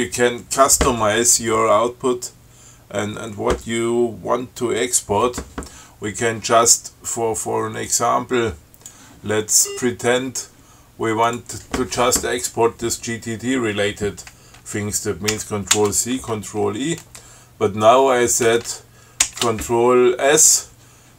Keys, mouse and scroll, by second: 8.2 click, 9.9 scroll up 2, 11.5 click, 15.6 ctrl+c, 16.0 ctrl+e, 19.5 ctrl+s.